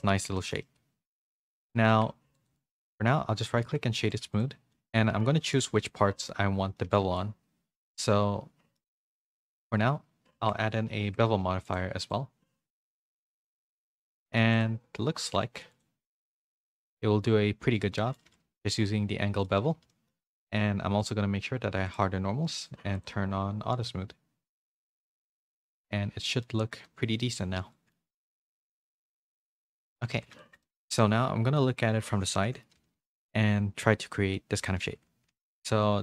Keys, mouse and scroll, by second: 0.3 shift+middle click, 0.6-1.8 middle drag, 2.3 Tab, 2.3 click, 4.0 Tab, 4.0 2, 4.7 middle click, 5.5 Tab, 6.0 middle click, 6.8 a, 7.0 a, 7.1-8.7 middle drag, 9.0 Tab, 9.2 middle click, 11.7 Tab, 11.7 click, 12.0 click, 13.8 a, 14.0 a, 14.1 middle click, 14.5 click, 16.4 click, 16.9-18.1 middle drag, 18.6 middle click, 18.6 a, 19.5 a, 19.9 middle click, 19.9 a, 21.0 click, 21.8 click, 22.9 click, 24.6 click, 25.1 a, 25.3 a, 25.4 middle click, 26.2 middle click, 26.8 middle click, 27.7 shift+middle click, 28.4 middle click, 28.8 click, 29.1 a, 29.3-30.5 middle drag, 30.6 middle click, 31.4 KP_3, 32.0 z, 32.4 shift+middle click, 32.8 a, 33.1 shift+middle click, 35.3 a.